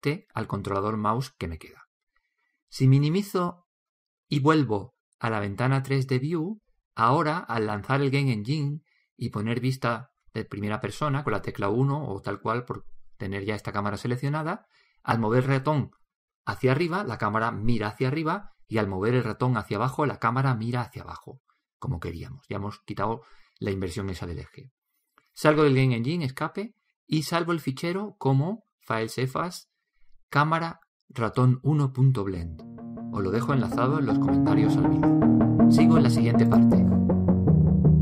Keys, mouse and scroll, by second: 3.9 ctrl+Up, 6.5 p.